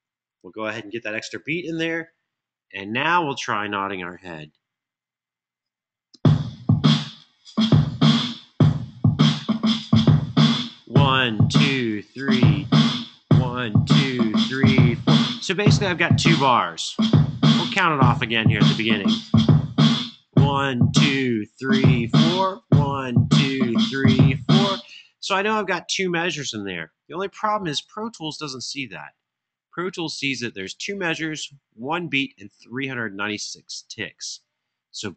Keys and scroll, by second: 0.1 Home, 5.9 space, 24.6 space.